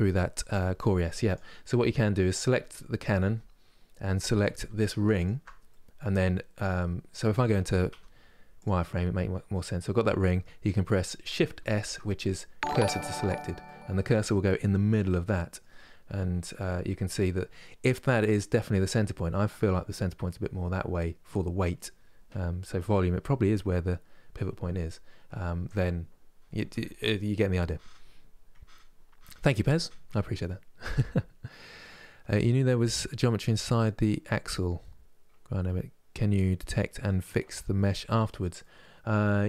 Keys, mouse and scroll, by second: 2.9 Tab, 3.3 scroll up 2, 4.3 2, 4.8 alt+click, 5.4-7.6 middle drag, 7.6 z, 8.6-11.5 middle drag, 11.5 shift+s, 13.3-15.9 middle drag, 15.9 KP_1, 38.3-39.4 middle drag.